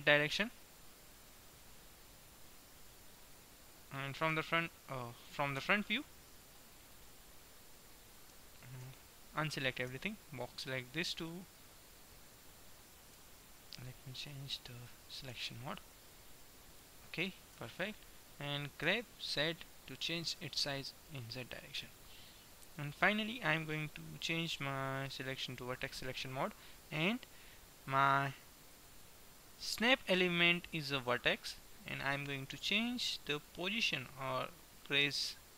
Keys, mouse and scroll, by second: 1.4-3.4 drag, 4.4 q, 5.6 KP_1, 9.1 a, 10.1 b, 11.6-13.2 drag, 13.2 KP_1, 14.2-15.9 drag, 15.4 b, 17.6 KP_1, 18.7 g, 22.6-24.6 middle drag, 24.6-26.4 drag, 25.6-27.4 right drag, 28.7-30.6 drag, 32.7-33.9 middle drag, 35.2 g.